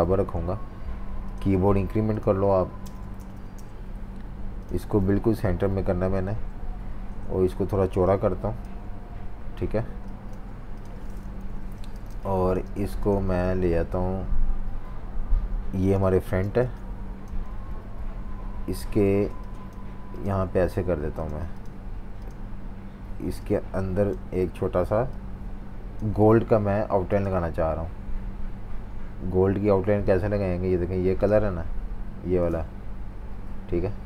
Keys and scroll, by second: 4.3 typing, 11.2 super+-, 11.3 super+-, 11.9 typing, 15.7-17.5 typing, 18.6 typing.